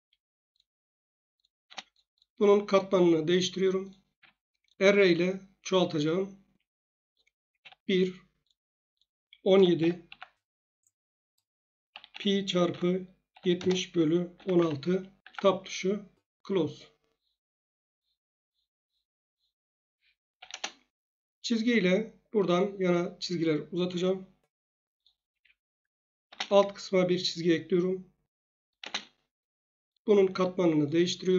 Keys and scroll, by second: 1.6 space, 4.1 Escape, 7.5 1, 9.3-10.3 typing, 11.9-14.5 typing, 15.2 Tab, 20.0 Escape, 20.3 l, 20.5 Return, 25.3 Escape, 26.2 space, 28.8 space.